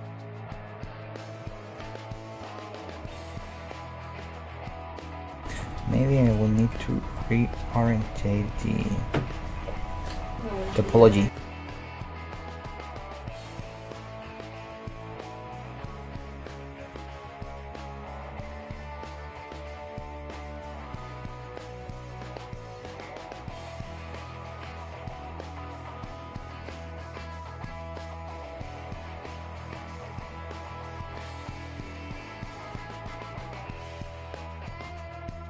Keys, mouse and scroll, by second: 5.5 \, 5.7 middle click, 9.1 middle click, 11.3 \, 11.5-17.8 middle drag, 15.1-16.8 right drag, 17.3-20.7 right drag, 18.3 middle click, 20.4 alt+m, 20.7-22.5 middle drag, 22.4 g, 23.0-27.3 middle drag, 24.1-25.4 drag, 24.1 g, 25.7-27.3 drag, 27.3 right click, 29.7-31.6 middle drag, 31.2 alt+m, 32.7 g, 33.9 middle click.